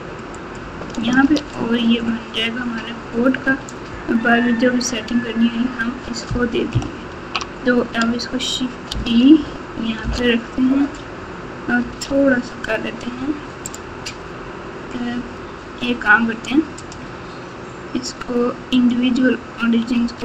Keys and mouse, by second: 0.4 alt+shift+click, 6.7 ctrl+KP_2, 7.2 ctrl+KP_2, 7.3 ctrl+KP_2, 8.9 shift+d, 11.8 s, 16.7-18.9 drag, 19.9 s.